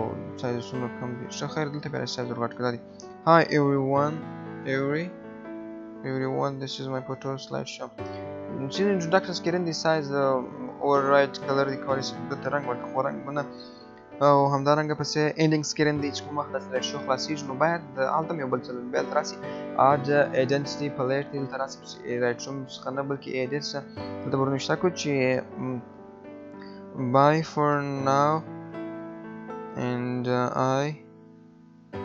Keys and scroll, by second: 30.9 BackSpace.